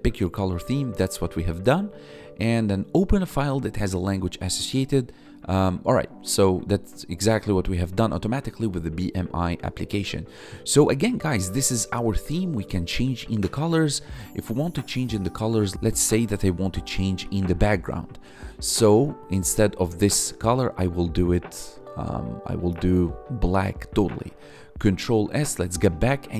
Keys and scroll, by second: 10.3 Tab, 13.5 Tab, 15.7 k, 17.5 Return, 18.0 Escape, 23.8 ctrl+s, 25.2 Tab.